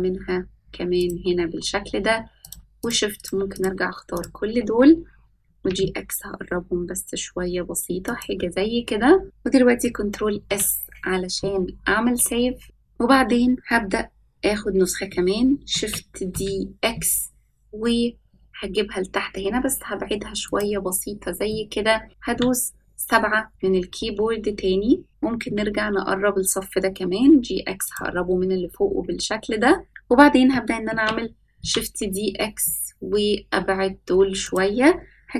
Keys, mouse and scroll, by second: 2.4 shift+click, 2.8 shift+click, 3.1 shift+click, 3.5 shift+click, 4.1 shift+click, 5.4 g, 10.3 ctrl+s, 15.7 shift+d, 21.4-22.1 middle drag, 22.1 scroll up 3, 22.2 KP_7, 23.5-25.1 scroll up 2, 25.2 g, 30.8 shift+d.